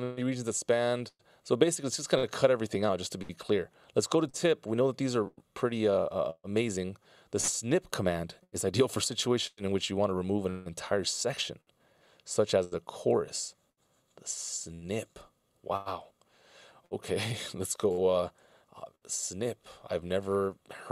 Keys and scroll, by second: 20.8 super+a.